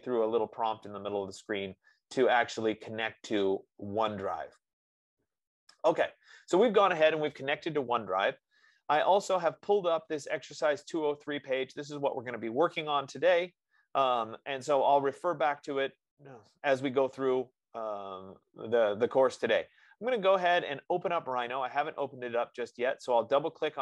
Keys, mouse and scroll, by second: 8.7-9.5 scroll down 4, 9.5-14.0 middle drag, 9.5 scroll, 14.4-19.4 middle drag, 14.4 scroll, 15.0-15.5 scroll, 22.5-23.8 drag.